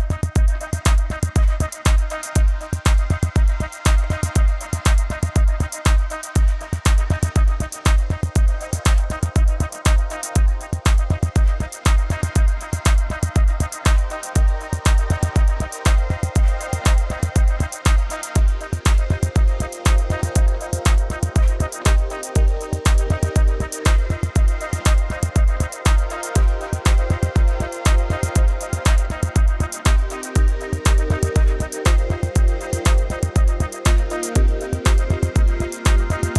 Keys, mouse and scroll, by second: 12.4 click, 30.8 KP_Enter, 31.8 click, 32.5 click, 33.1 KP_Enter, 33.3 Left, 35.2 click.